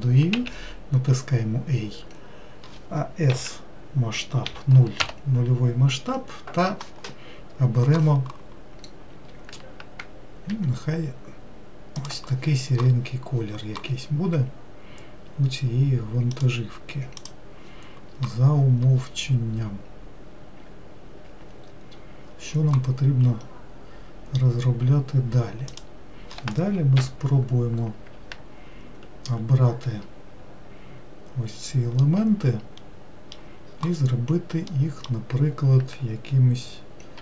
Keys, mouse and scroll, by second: 3.9 s, 11.1 g, 26.3 click, 27.5 ctrl+l, 32.5-37.2 middle drag.